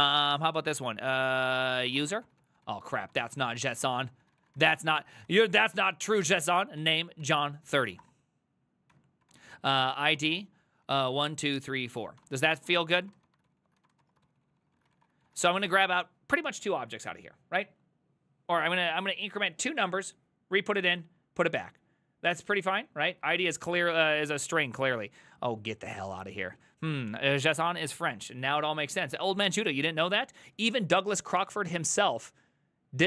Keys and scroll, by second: 0.0-6.0 typing, 6.8 Tab, 7.2-7.7 ctrl+c, 7.7-10.8 typing.